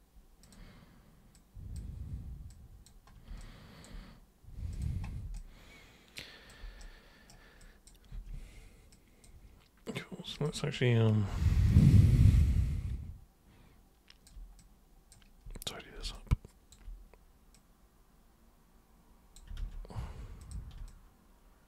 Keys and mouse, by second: 0.4 super+click, 1.3 super+click, 2.5 super+click, 3.4 alt+super+click, 4.7 super+click, 5.3-6.5 alt+super+drag, 6.8 super+right click, 7.6 super+click, 8.1 super+w, 8.9 super+click, 10.3 super+click, 11.7 super+click, 12.4-14.2 alt+super+drag, 14.5-15.0 super+drag, 16.1-16.7 alt+super+drag, 17.5 super+click, 19.6 ctrl+super+z, 20.3 super+click, 20.8 alt+super+click.